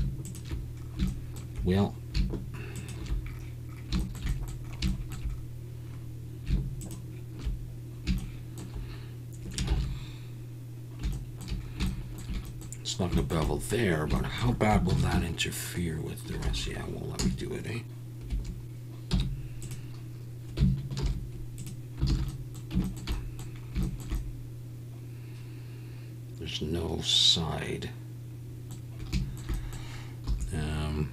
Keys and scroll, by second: 9.7 ctrl+z, 14.9 ctrl+b, 16.4 Escape, 17.2 a, 18.3 Escape, 19.1 m, 21.0 alt+n, 22.1 alt+a, 30.3 2.